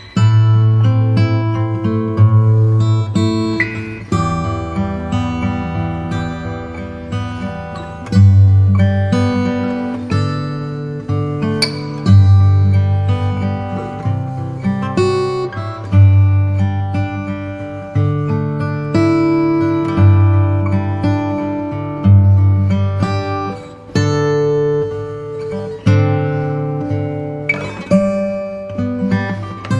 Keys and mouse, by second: 2.4 click, 3.6 KP_1, 4.3 click, 5.2 click, 11.8 KP_7, 14.6 middle click, 17.9 alt+click, 26.1-28.5 right drag.